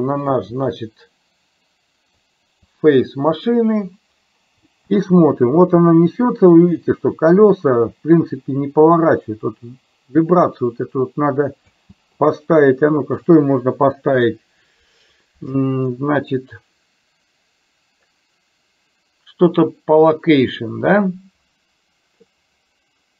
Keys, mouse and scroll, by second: 4.8 space, 11.7 space, 13.2 right click.